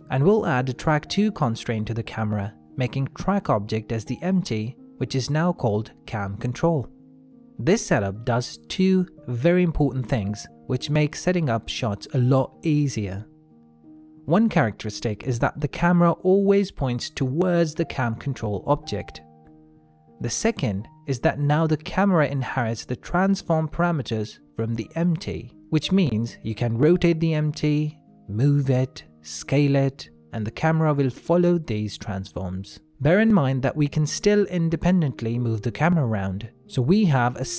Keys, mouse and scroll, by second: 0.6 click, 7.1 click, 10.0 shift+middle click, 11.0 middle click, 15.2 click, 15.6 middle click, 16.8 g, 20.6 middle click, 21.2-21.5 scroll down 1, 21.5 g, 22.9 click, 23.5 middle click, 24.2 g, 25.9 r, 27.8 g, 28.7 s, 31.7 g, 34.0 click, 34.4-34.9 scroll down 1, 34.9 middle click, 35.4 g.